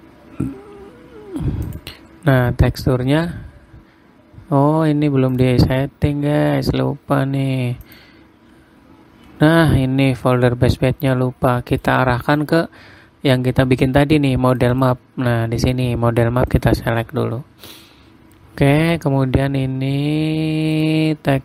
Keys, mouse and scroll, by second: 0.9-2.0 scroll down 2, 2.2 click, 7.8-8.4 scroll up 9, 8.4 click, 9.2-10.8 scroll up 11, 10.8 click, 12.8 scroll, 18.8-19.4 scroll down 7, 20.4-21.3 scroll down 4, 21.3 click.